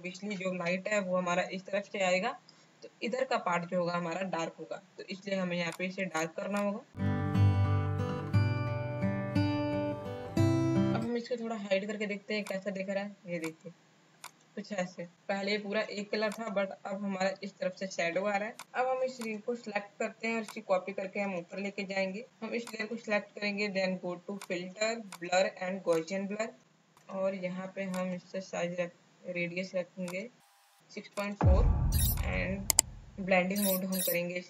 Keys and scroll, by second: 7.6 space, 8.5 space, 9.4 space.